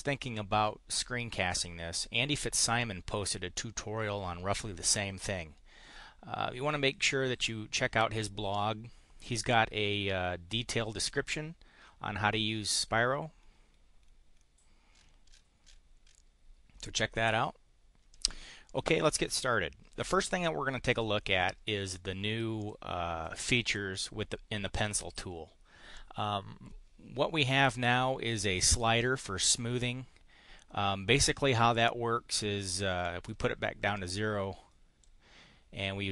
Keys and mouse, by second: 7.0-9.6 drag, 18.1 click, 18.6 click, 22.5 click, 29.2-31.3 drag, 33.0 click, 34.1-35.1 drag.